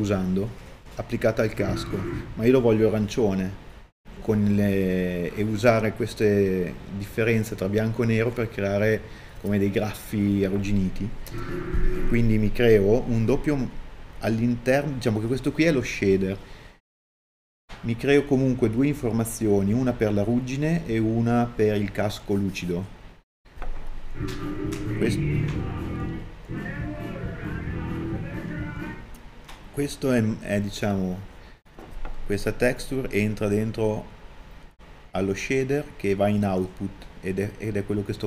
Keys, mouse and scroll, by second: 2.7 shift+d, 27.1 click, 27.2 middle click, 27.8 click.